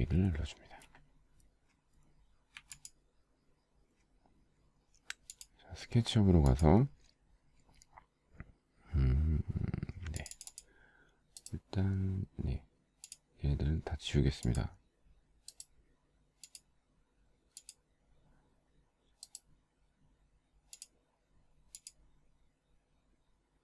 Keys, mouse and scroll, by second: 3.5 z.